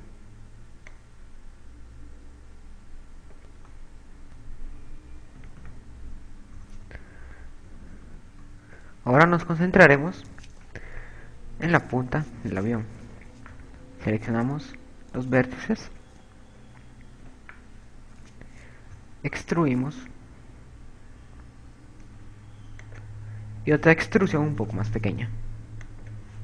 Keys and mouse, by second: 1.1 click, 2.1 click, 4.9 a, 5.1 a, 6.0 z, 7.1-9.1 typing, 10.5 KP_8, 10.9 KP_6, 11.4 KP_6, 12.9 z, 13.7 KP_6, 14.7 b, 18.1 z, 18.7 KP_2, 20.9 e, 24.5 e.